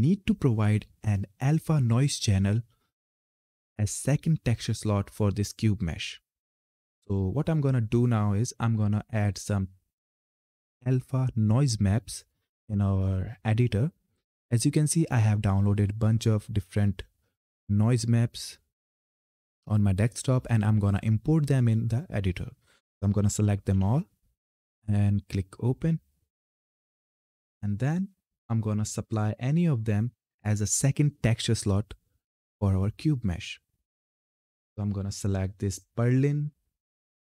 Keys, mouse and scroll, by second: 9.0 click, 11.0-13.4 scroll down 1, 13.9-14.9 scroll up 1, 14.9-17.3 scroll down 1, 17.3 click, 18.0-18.7 scroll up 1, 22.6 ctrl+Num_Lock, 22.6-23.2 scroll up 1, 23.2 ctrl+a, 25.2 click.